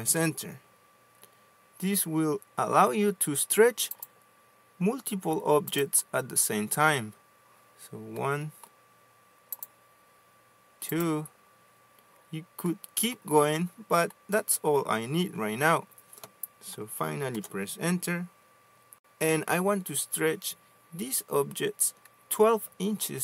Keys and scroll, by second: 0.7 Return, 18.0 Return.